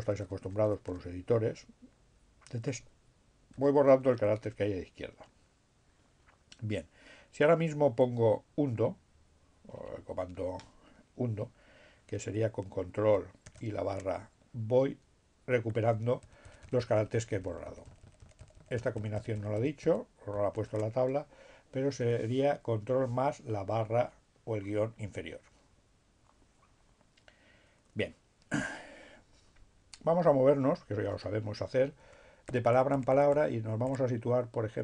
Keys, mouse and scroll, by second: 1.4 BackSpace, 13.1 ctrl+shift+-, 16.3 ctrl+shift+-, 30.6 alt+b, 34.6 b.